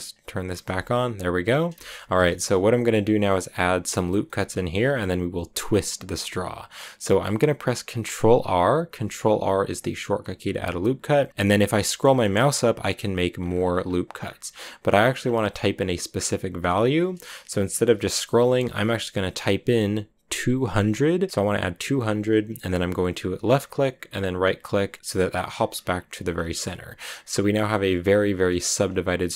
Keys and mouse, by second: 0.0 click, 0.5 n, 2.1 shift+middle click, 4.1 click, 8.8 ctrl+r, 25.0 click, 28.3 click.